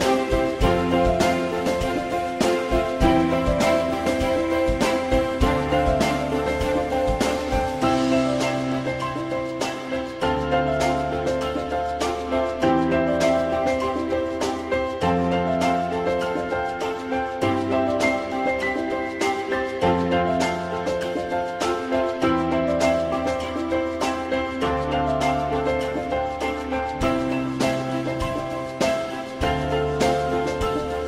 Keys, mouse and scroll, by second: 1.7 shift+click, 5.1 e, 12.6 click, 13.2 alt+middle click, 16.0 e, 18.2 alt+middle click, 28.2 click.